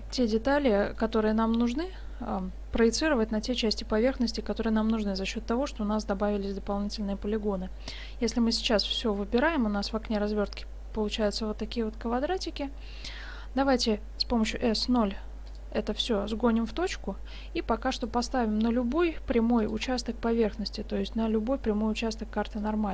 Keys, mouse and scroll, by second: 0.2 middle click, 0.2 a, 0.3 a, 0.9-2.7 middle drag, 3.2 middle click, 3.3 middle click, 3.8-5.8 middle drag, 8.3 a, 8.5 a, 14.4 s, 16.2 g, 18.3-22.0 drag, 18.9 g, 20.4 g.